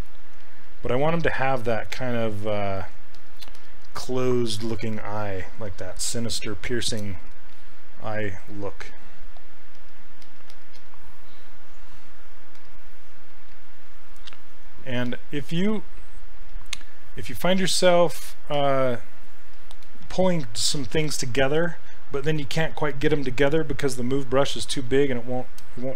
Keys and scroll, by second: 0.4 s.